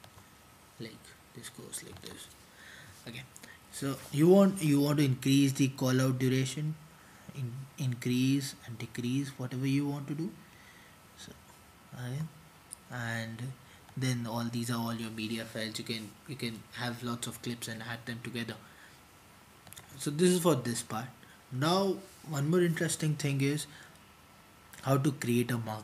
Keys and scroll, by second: 23.0 super+t, 23.0 typing.